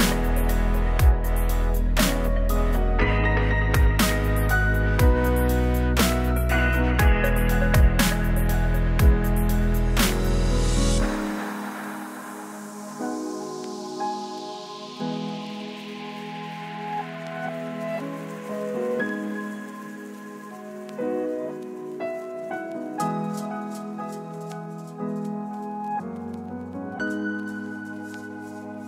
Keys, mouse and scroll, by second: 0.2 click, 0.4 right click, 1.3 j, 1.5-2.9 right drag, 2.9 j, 3.2 right click, 3.7 j, 4.0 click, 4.3 right click, 5.3 Delete, 6.9 right click, 7.8 Tab, 8.1 Tab, 8.7 l, 9.1 p, 11.8 right click, 13.0 ctrl+z, 13.9-17.0 drag, 17.8 BackSpace, 18.0 BackSpace, 18.9 BackSpace, 19.6 BackSpace, 21.0 z, 23.7 click, 24.6 shift+z, 25.4 click, 25.6 Tab, 28.5 middle click.